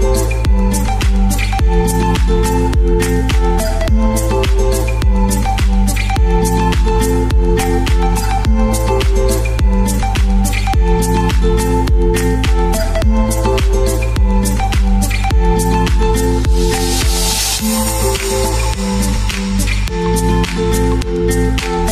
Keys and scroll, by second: 0.8 space, 1.9 space, 17.9 shift+super+g.